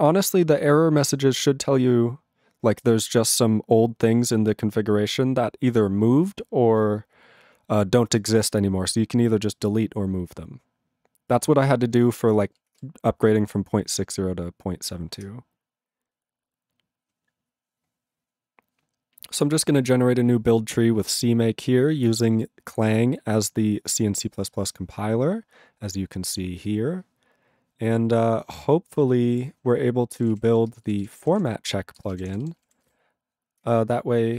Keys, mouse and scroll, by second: 12.3 ctrl+n.